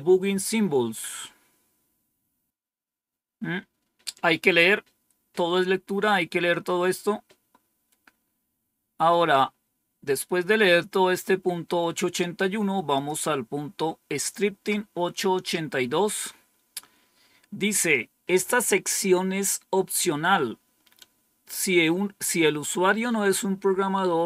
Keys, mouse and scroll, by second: 12.8 click, 16.2 scroll up 2.